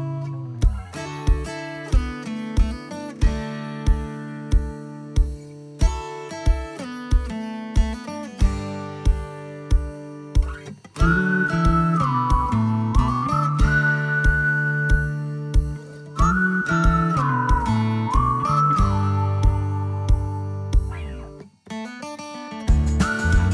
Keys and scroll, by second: 2.7 space, 6.2 m, 10.6 shift+space, 12.3-14.1 typing.